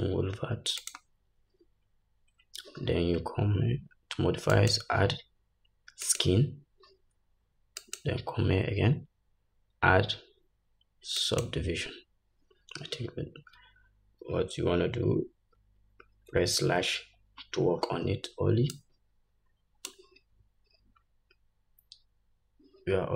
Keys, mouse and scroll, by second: 18.0-19.0 scroll down 2, 19.0-19.3 scroll down 1, 20.5-21.0 scroll down 2.